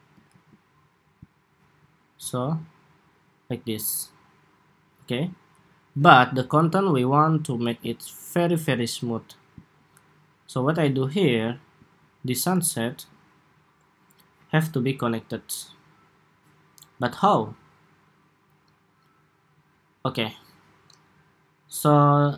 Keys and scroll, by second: 0.0 super+s.